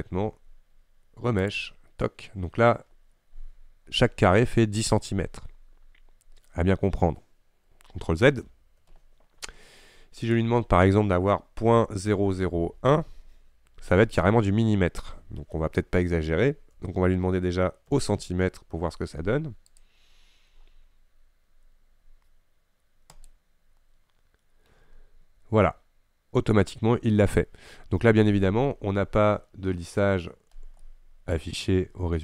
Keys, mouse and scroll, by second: 1.6-8.5 drag, 8.5 ctrl+z, 23.5-25.3 drag, 25.3-25.8 scroll up 5, 26.5-28.2 scroll down 5, 30.9-32.2 middle drag.